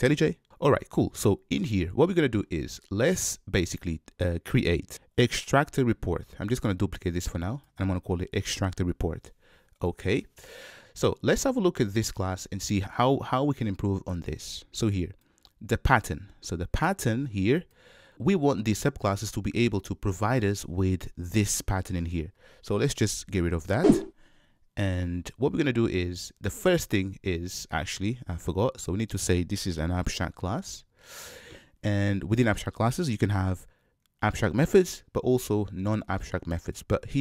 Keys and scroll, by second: 5.2 super+c, 5.7 super+v, 30.4 Return.